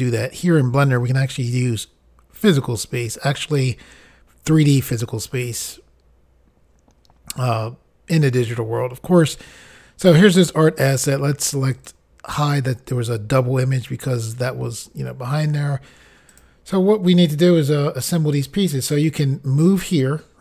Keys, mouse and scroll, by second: 11.7 click, 16.3 click.